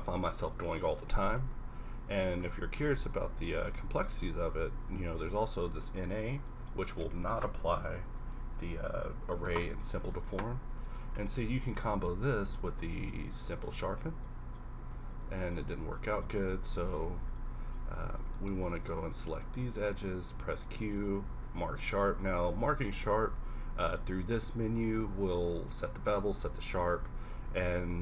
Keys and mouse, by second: 1.7 ctrl+z, 2.7 z, 3.0 z, 4.1 q, 8.0-10.9 middle drag, 11.5 middle click, 12.0 q, 13.9-14.5 middle drag, 14.9 Tab, 16.5 z, 17.3 z, 20.3 q, 23.7 q, 26.5 middle click, 27.0 Tab, 27.9 middle click.